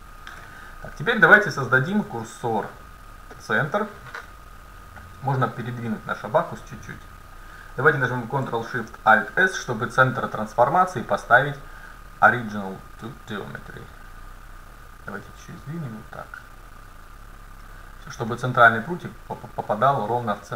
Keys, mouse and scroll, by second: 0.4 KP_7, 1.9 shift+s, 5.2-7.6 right drag, 9.3 ctrl+alt+shift+c, 14.4-16.3 drag, 18.3-20.1 middle drag, 20.1-20.5 drag.